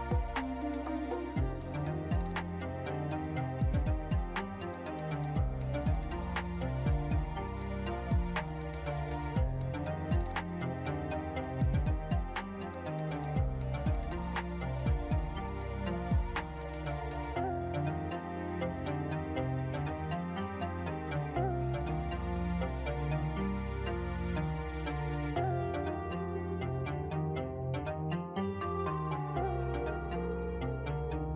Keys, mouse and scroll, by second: 0.4 click, 3.8 z, 4.9 shift+middle click, 7.1 middle click, 8.4 shift+middle click, 9.8 right click, 11.9 click, 15.9 click, 17.2 click, 22.1 click, 24.0 click, 26.5 click, 29.2 n, 29.7 scroll up 5, 30.1 middle click, 31.0-31.3 scroll up 2.